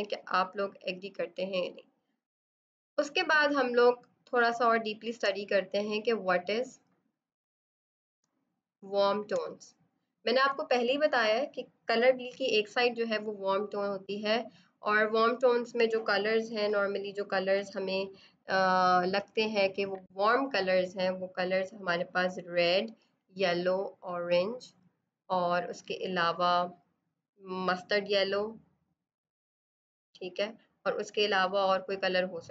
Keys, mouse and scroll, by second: 4.3 space, 4.5 click, 4.8 space, 6.6 click, 8.1 space, 8.6 click, 8.7 space, 16.4 b, 19.0 F7, 21.3 click, 27.9 click.